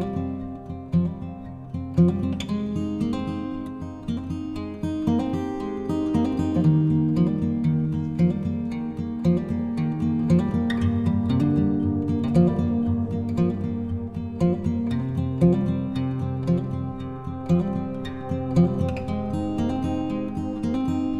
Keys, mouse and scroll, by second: 7.6 click, 10.5-19.0 drag.